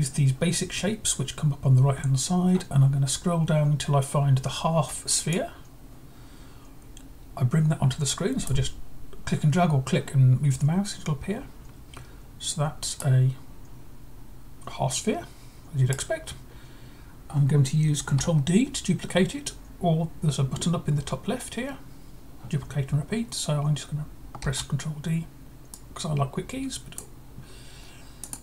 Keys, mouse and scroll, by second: 2.7 scroll down 1, 5.2-8.4 drag, 12.9-15.8 right drag, 24.3 ctrl+d, 25.6-26.9 drag, 28.1-28.4 drag.